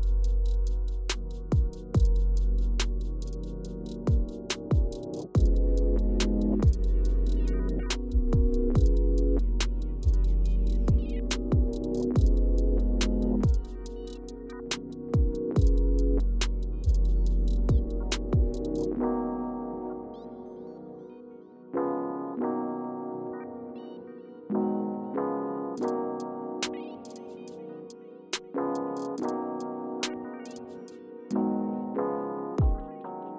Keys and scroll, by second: 0.1 Left, 0.3 Left, 0.8 Left, 1.3 Right, 2.3 Right, 3.0 Return, 4.2 Return, 5.0 Left, 5.2 Left, 5.4 Left, 6.1 Right, 6.6 Return, 7.3 Return, 9.2 Right, 18.8 Up, 19.2 Up, 20.4 Down, 21.9 Return, 22.7 Down, 23.0 Down, 23.1 Down, 24.9 Right, 28.1 Return, 30.9 Left, 32.5 Left, 32.6 Left.